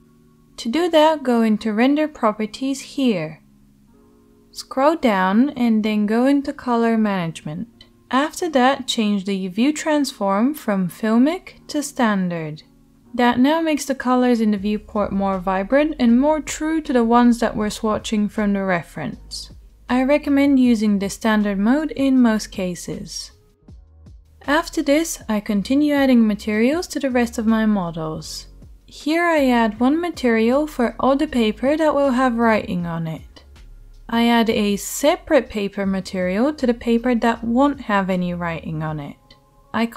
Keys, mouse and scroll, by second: 4.4-13.1 middle drag, 4.4-13.1 right drag, 23.1-26.9 right drag, 24.3-26.9 drag, 24.3-27.4 middle drag, 27.4 shift+right click, 27.6 middle click, 27.9-28.5 scroll, 28.5 middle click, 28.6 right click, 28.6-31.7 middle drag, 31.7-32.5 drag, 32.5 middle click, 32.9 click, 33.3 shift+middle click, 33.8-34.9 drag, 34.9 middle click, 35.1 shift+click, 35.5 middle drag, 35.8 right click, 36.3 shift+middle click, 36.8 right click, 37.5 middle click, 38.3 right click, 39.2 middle click.